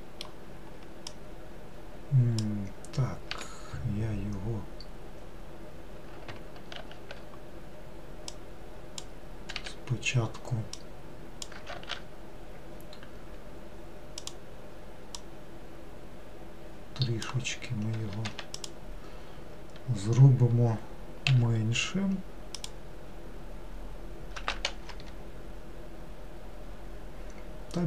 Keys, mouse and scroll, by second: 1.2 click, 3.4 1, 6.8 ctrl+z, 8.4 click, 9.7 1, 10.8 click, 11.8 ctrl+z, 14.3 click, 15.2 click, 18.3 3, 18.6 click, 21.4 s, 24.4 s.